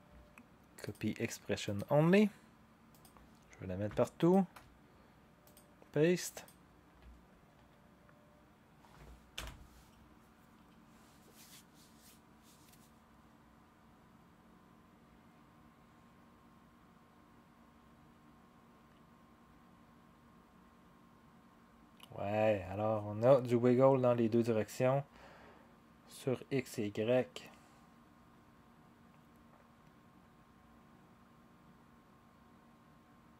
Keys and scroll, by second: 9.3 0.